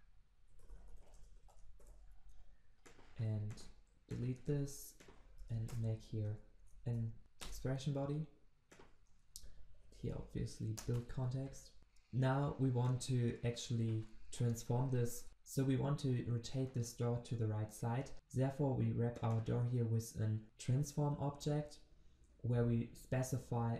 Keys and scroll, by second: 1.3 ctrl+v, 4.4 ctrl+x, 7.4 alt+Return.